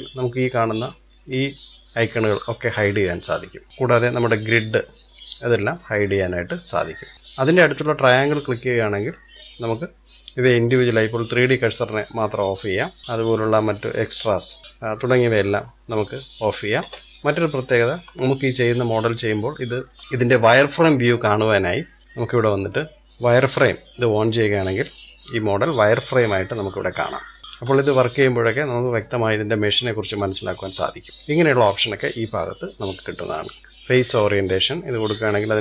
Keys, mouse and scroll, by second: 2.9 click, 3.7 click, 6.6 click, 7.0-10.1 drag, 17.2-17.5 scroll up 2, 17.5-18.5 shift+middle drag, 18.5-18.9 scroll up 2, 18.9-21.9 middle drag, 22.3-24.1 drag, 24.8-29.8 middle drag, 29.8-30.2 scroll down 1, 30.2-31.1 shift+middle drag, 31.1-33.6 drag, 35.1-35.6 middle drag.